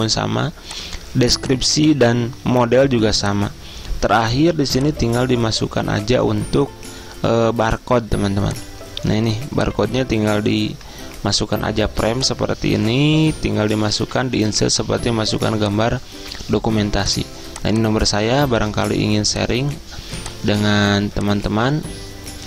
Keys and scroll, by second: 4.6 z.